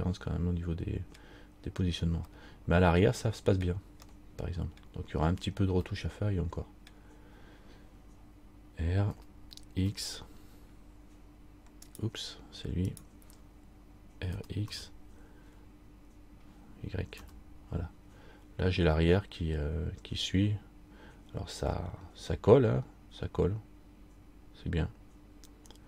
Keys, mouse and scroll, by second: 0.7 middle click, 2.0-2.4 scroll down 1, 3.8 middle click, 4.2 middle click, 6.1 middle click, 9.3 r, 13.1 right click, 14.5 r.